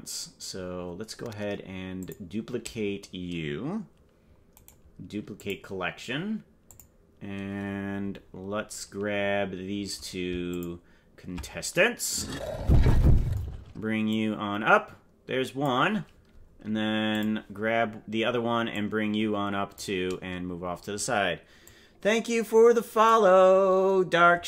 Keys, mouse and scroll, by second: 1.9 click, 4.5-5.5 right drag, 6.6 click, 8.1-8.9 scroll down 7, 10.5 ctrl+click, 14.1-15.6 drag, 17.1 click, 18.7-19.7 drag, 21.6-23.0 drag.